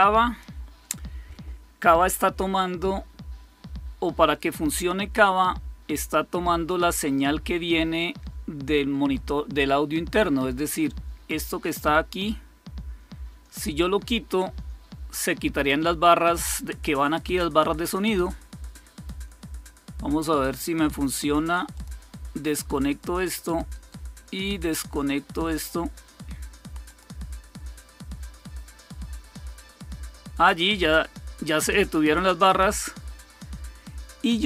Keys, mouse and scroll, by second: 6.6 click, 11.5 click, 20.1 right click, 21.6 click, 22.8 click, 23.6-24.7 right drag, 26.8 click.